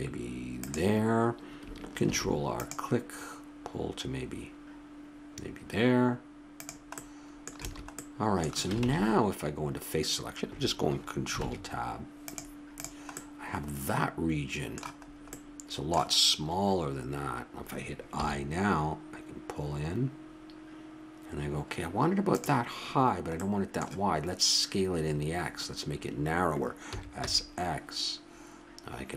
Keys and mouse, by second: 2.1 ctrl+r, 7.0 middle click, 7.6 a, 8.9 ctrl+Tab, 11.4 ctrl+Tab, 12.7-14.6 right drag, 15.0-17.2 middle drag, 18.2 i, 23.4-25.3 middle drag, 26.9 s.